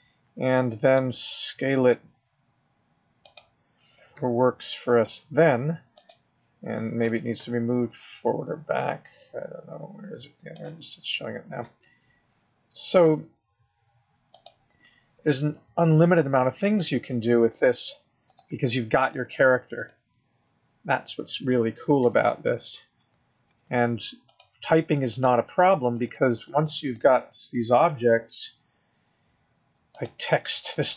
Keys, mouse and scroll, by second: 0.9 s, 4.2 g, 7.0 g, 11.7 g, 16.5-17.5 scroll up 1, 17.5-18.3 scroll down 1, 18.3 click, 19.0 click, 19.7 click, 22.0 Tab, 24.2 click, 25.1 click, 25.8 click, 26.0 click, 26.6 click, 26.9 click, 28.0-28.5 scroll up 2, 28.5-29.9 scroll down 4.